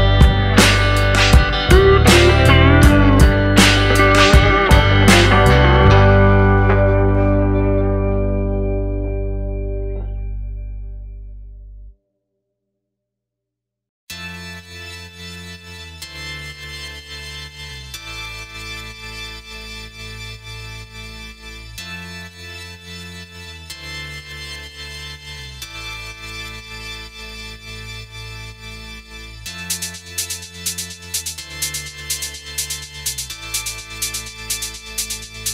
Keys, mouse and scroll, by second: 0.7 click, 1.1 click, 1.7 click, 2.1 click, 2.8 click, 3.5 ctrl+z, 4.1 click, 5.1 click, 5.9 click, 6.3 click, 6.8-7.1 scroll down 4, 7.5-7.8 scroll up 2, 8.2-8.7 scroll down 3, 8.7-9.2 scroll up 3, 9.4-10.0 scroll down 2, 9.7 middle click, 10.4 scroll up 2, 10.9-11.2 scroll down 3, 12.4 click, 12.7 scroll down 2, 13.0 middle click, 13.5-14.4 scroll up 2, 14.8 click, 15.1-15.5 scroll up 2, 15.6 shift+middle click, 15.9-16.5 scroll up 3, 16.1 middle click, 16.5 Tab, 17.0-17.4 scroll up 1, 20.5 click, 21.7 click, 24.8 click, 25.5 click, 27.1 click, 30.3 click, 31.2 click, 34.2 click.